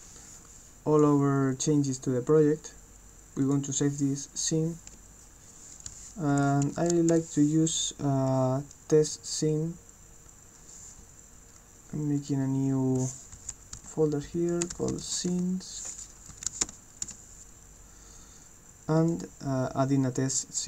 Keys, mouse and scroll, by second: 3.4 click, 6.9 s, 12.2 click, 13.3 shift+s, 16.5 s, 19.0 click.